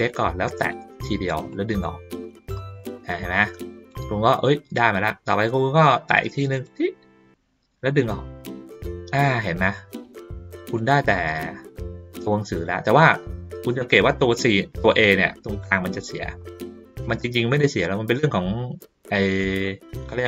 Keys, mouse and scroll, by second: 0.6 click, 1.5-3.9 drag, 6.5 click, 7.8-10.7 drag, 12.1 ctrl+middle click, 13.1 ctrl+middle click, 13.4 ctrl+middle click, 14.4 ctrl+middle click, 14.9 ctrl+middle click, 15.4 middle click, 17.8 middle click, 18.7 ctrl+middle click.